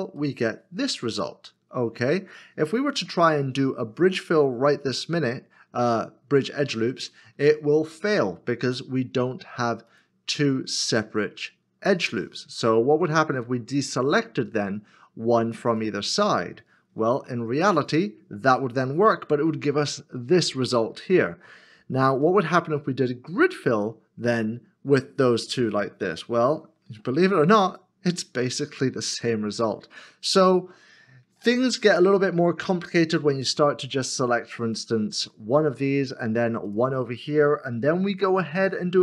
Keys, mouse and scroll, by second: 0.2 ctrl+f, 0.2 middle click, 2.8 ctrl+z, 7.9 ctrl+e, 13.7 shift+click, 15.7 shift+click, 17.0 ctrl+e, 22.0 ctrl+z, 26.9 ctrl+f, 30.5 ctrl+z, 34.7 alt+click, 36.7 shift+l, 36.7 shift+click, 38.5 ctrl+f.